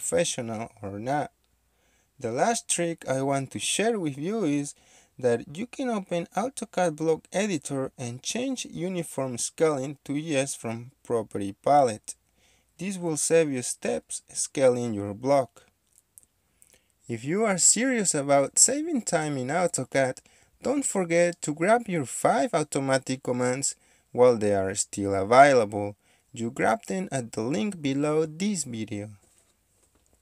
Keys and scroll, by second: 10.3 typing, 10.5 Return, 15.1 typing, 19.3 Escape, 20.1-20.5 typing, 21.3 Escape, 25.9 KP_9, 26.1 KP_6, 26.9 Return, 30.1 Escape.